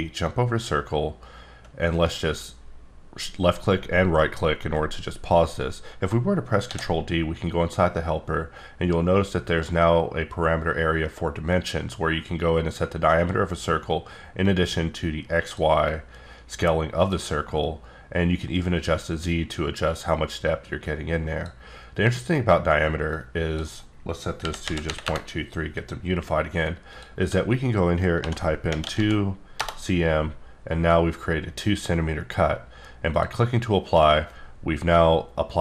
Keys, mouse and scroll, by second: 0.1 click, 1.9 right click, 6.7 ctrl+d, 14.4 click, 15.9 click, 17.7 click, 23.1 click, 24.4 KP_Decimal, 24.6 KP_2, 24.8 KP_3, 25.0 KP_Enter, 26.9 click, 28.2-28.9 typing, 29.6 Return.